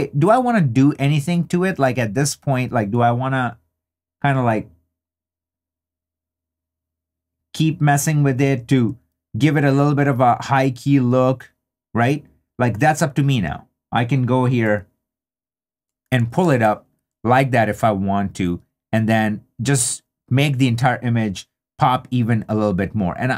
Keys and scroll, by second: 16.2 super+d.